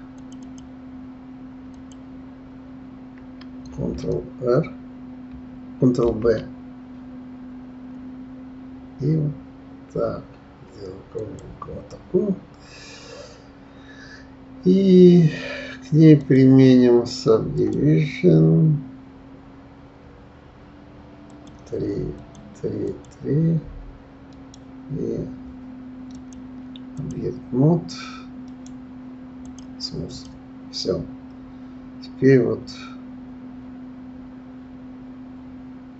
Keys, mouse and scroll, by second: 0.4 click, 1.7 click, 6.0 ctrl+b, 16.2-19.2 drag, 21.3 click, 22.2 click, 22.9 click, 24.3-26.1 right drag, 26.1-28.4 drag, 28.4-30.1 right drag, 30.1 click, 30.8-32.3 scroll down 3.